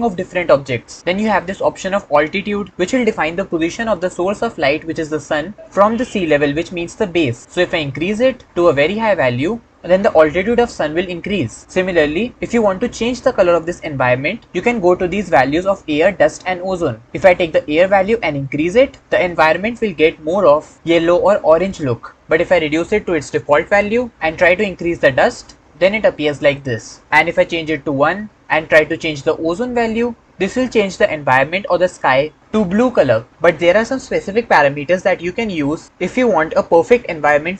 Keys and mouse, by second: 8.1-11.6 drag, 18.4-23.6 drag, 24.7-26.5 drag, 27.0-28.0 drag, 28.0-32.4 middle drag.